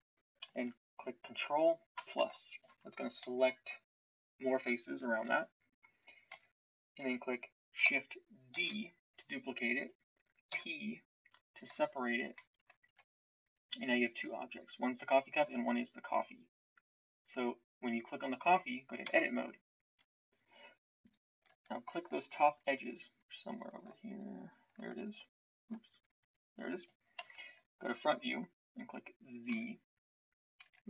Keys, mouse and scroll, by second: 1.9 ctrl+KP_Add, 5.2 KP_1, 6.2 z, 8.5 shift+d, 10.4 p, 12.8 Tab, 13.4-16.3 drag, 19.0 Tab, 27.1 super+KP_1, 29.5 z, 30.6 z.